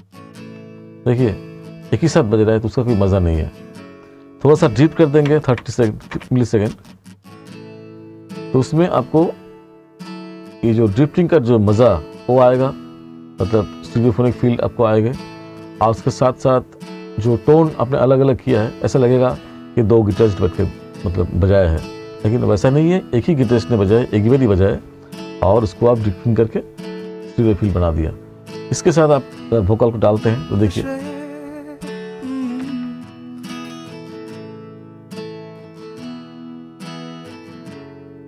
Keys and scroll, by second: 5.3 ., 32.7 ctrl+=.